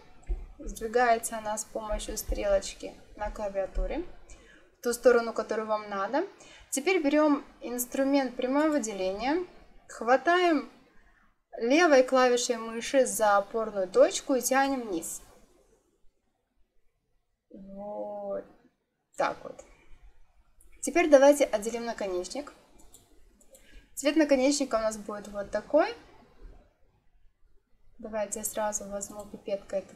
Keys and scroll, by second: 0.1 Right.